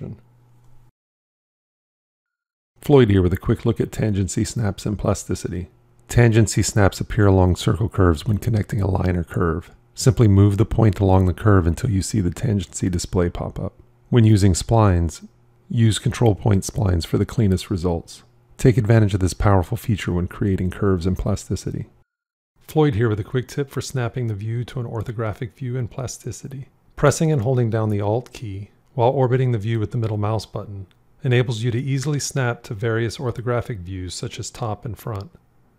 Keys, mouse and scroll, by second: 16.6 drag, 16.7-17.4 typing, 28.0 alt+middle click.